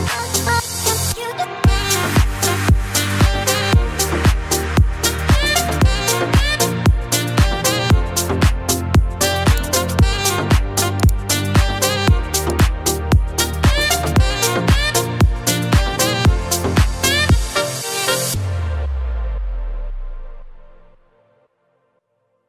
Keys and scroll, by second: 5.2 space, 7.2 n, 12.7 space.